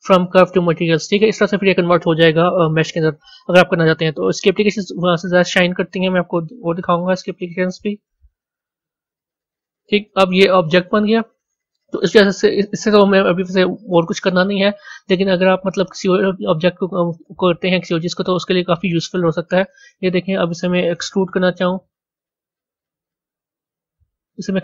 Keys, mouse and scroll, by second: 10.6-13.7 middle drag, 18.6 b.